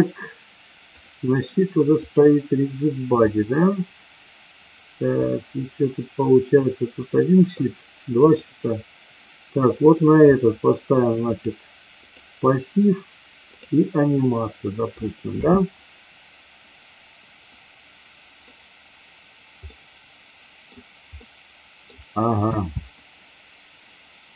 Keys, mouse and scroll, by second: 1.1 click, 1.9 click, 3.3-7.7 middle drag, 8.3 click, 9.8 click, 11.2 click, 13.4 click, 14.2 middle click, 15.4 space, 17.6 middle click, 19.7-20.8 middle drag, 21.2 middle click, 22.6 space.